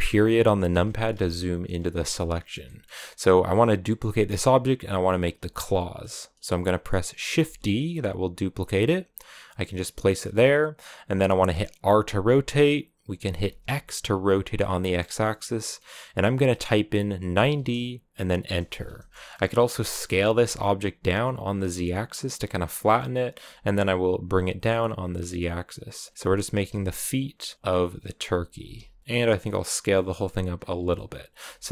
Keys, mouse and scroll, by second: 0.5 KP_Decimal, 1.8 scroll down 2, 2.0-3.1 middle drag, 3.1-7.3 scroll up 1, 7.3 shift+d, 11.6 r, 18.9 middle click, 19.5 s, 22.8 middle click, 23.2 g, 26.0 scroll down 4, 26.1 middle click, 26.3 g, 27.5 middle click, 28.1-28.4 scroll down 1, 28.4 g, 29.0-30.7 scroll up 3, 30.7 middle click, 31.5-31.7 scroll up 4.